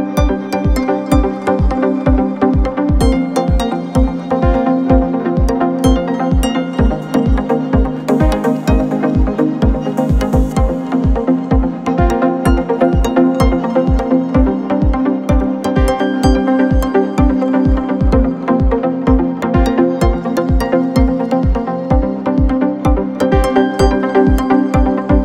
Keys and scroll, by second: 0.9 4, 2.4 1, 2.7 ctrl+F1, 8.7 4, 22.0 t, 22.2 r, 22.3 Return.